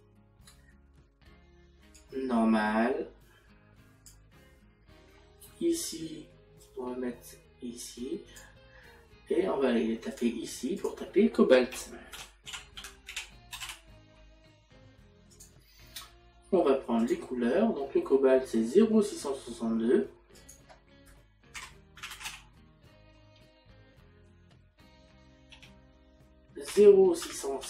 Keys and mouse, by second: 10.2 click, 17.0 click, 20.4 click, 26.5 Tab, 26.8 KP_Decimal.